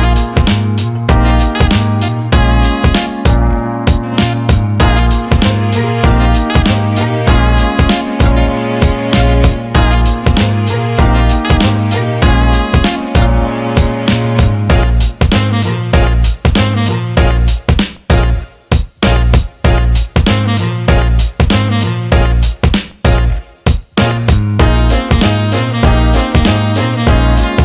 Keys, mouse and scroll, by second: 0.2 alt+shift+middle drag, 0.6 alt+middle click, 1.3 alt+middle click, 2.3-3.1 alt+middle drag, 4.5 alt+shift+middle drag, 5.6 click, 7.3 click, 8.1 shift+a, 14.0 shift+click, 15.5-17.5 shift+drag, 18.5 click, 20.7 alt+middle click, 21.5 alt+middle click, 21.9 click, 23.2 click, 24.0 click, 24.6 alt+shift+middle drag, 25.0 alt+middle click, 25.7 click, 26.1 alt+middle click, 27.1 alt+middle click.